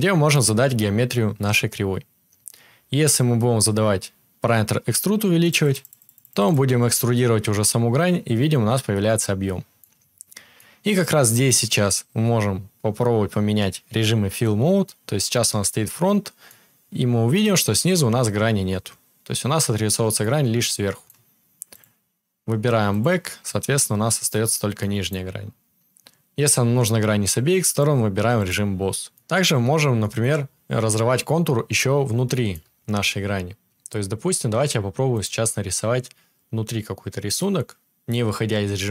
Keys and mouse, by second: 34.1 ctrl+z, 34.1 KP_7, 34.5-38.9 drag.